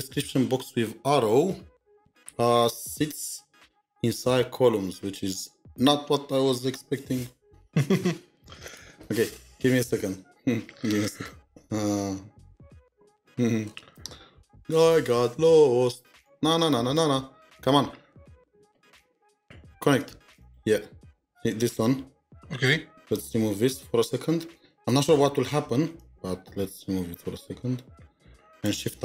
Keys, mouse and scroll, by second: 12.1 scroll down 1, 12.8-14.2 scroll down 3, 14.7-16.8 scroll up 1, 18.3 scroll up 1, 18.3-19.8 scroll down 1, 20.4 scroll down 1, 20.4 double click, 24.9 scroll up 1, 24.9 BackSpace.